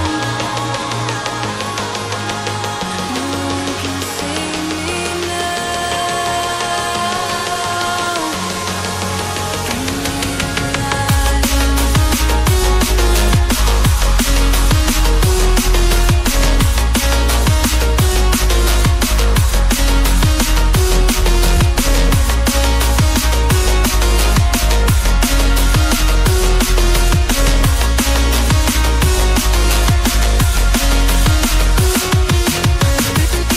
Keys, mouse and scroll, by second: 0.6 click, 3.2 click, 7.9 double click, 10.0 click, 11.0 scroll down 1, 12.3 scroll up 1, 15.0 click, 15.2 double click, 15.5 click, 16.8 double click, 18.6-19.1 scroll up 1, 19.3 click, 19.4 double click, 22.9 scroll down 1, 23.3 scroll up 1, 23.6 click, 23.8 double click, 24.5 click, 31.8 click.